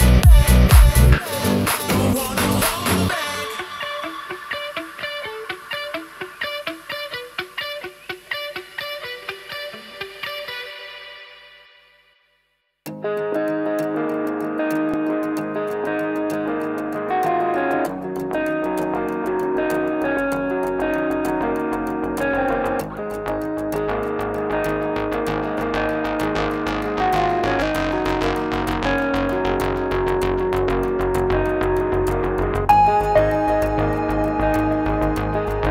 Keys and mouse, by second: 2.3 s, 7.4 click, 8.5 alt+s, 12.3 click, 12.8 Tab, 13.3-15.4 drag, 15.6 Tab, 16.1 3, 17.4 click, 18.3 click, 19.9 shift+click, 20.2 shift+click, 21.8 i, 23.3 s, 26.0 click, 28.0 alt+s, 29.2 Tab, 29.5-30.0 drag, 30.3-30.8 drag, 31.0 shift+drag, 31.4-31.9 drag, 32.1 ctrl+drag, 32.4-32.8 middle drag, 33.2-35.7 middle drag.